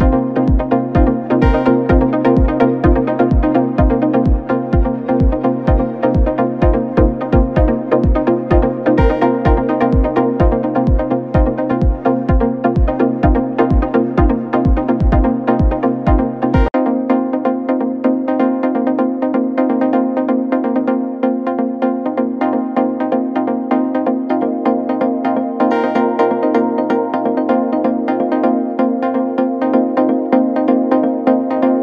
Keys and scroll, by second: 0.0 t, 0.2 o, 1.4 Return, 10.8 ctrl+a, 11.8 Down, 12.0 Down, 12.1 Down, 12.3 Down, 12.7 Down, 12.8 Down, 13.0 Down, 13.7 Down, 14.3 Down, 14.8 Down, 18.7 9, 18.8 0, 28.6 1, 28.8 ., 28.8 3, 29.7 0, 29.9 Return.